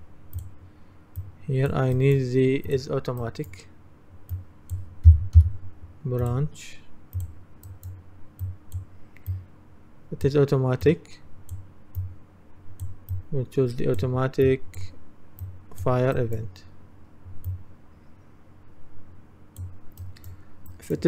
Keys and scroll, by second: 0.0-0.2 typing, 5.1-5.4 typing.